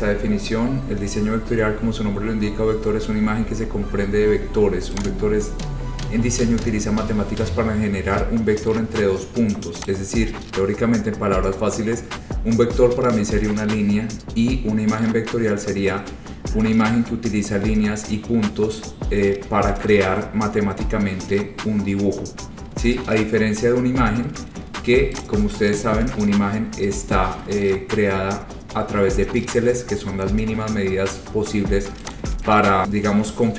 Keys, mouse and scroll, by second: 9.6 click, 10.0 click, 25.4 click, 26.1-26.5 scroll, 27.0-27.8 scroll, 28.4-29.0 scroll, 31.3-31.8 scroll, 32.2 click, 32.8 scroll.